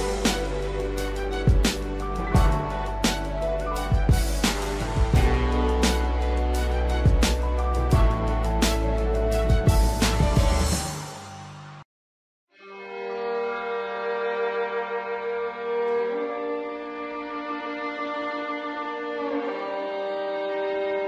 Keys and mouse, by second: 0.4-4.1 drag, 4.7-6.4 drag, 6.7 shift+middle click, 7.2 click, 10.9-14.4 drag, 14.6 shift+middle click, 16.8-18.2 drag, 18.8 click, 19.3 click.